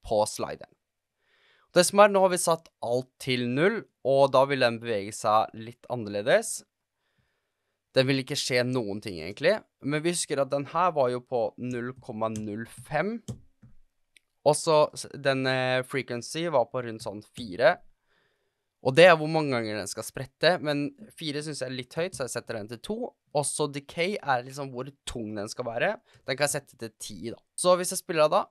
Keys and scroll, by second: 6.4 space, 9.1 space, 11.4-13.2 typing, 13.2 Return, 16.9 4, 17.3 Return, 21.9 2, 22.0 Return, 25.8-27.5 typing.